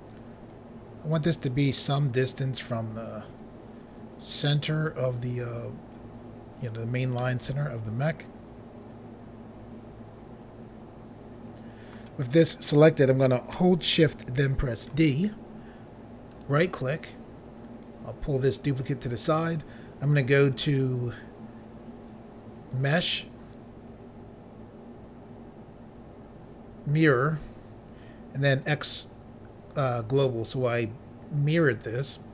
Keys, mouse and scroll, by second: 0.5 click, 7.2 middle click, 14.9 d, 16.3 right click, 17.8 click, 22.7 click, 28.6 click.